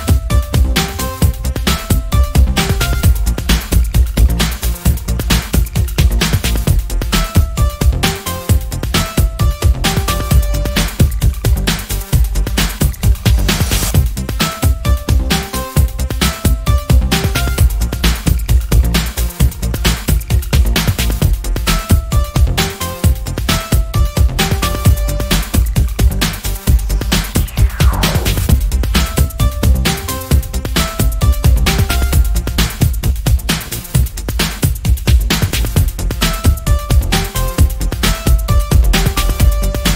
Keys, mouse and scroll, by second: 0.4 click, 2.2 click, 3.7 ctrl+d, 4.1 ctrl+click, 5.0 ctrl+z, 8.2 click, 9.6 shift+click, 10.6 ctrl+z, 11.6 ctrl+click, 12.7-16.6 ctrl+drag, 17.0 click, 17.3 click, 18.3-24.5 drag, 25.7 click, 26.6 click, 28.0 click, 28.6 click, 30.7 shift+click, 32.2 shift+click, 33.0 KP_6, 33.3 KP_Enter, 34.7 click, 36.0 click, 36.4 click, 37.6 click, 38.4 ctrl+scroll up 2, 39.5 ctrl+click.